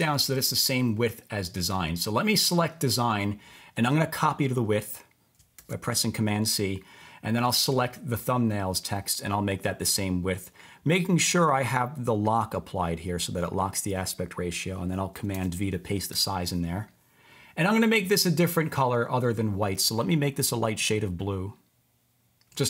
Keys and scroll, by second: 5.6 super+c, 15.4 super+v, 16.1 Return.